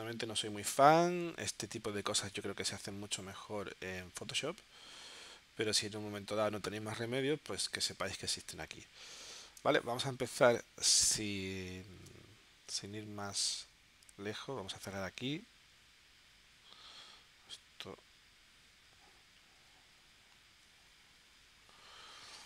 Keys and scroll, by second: 3.2 super+z, 6.4 z, 7.9 space, 9.6 space.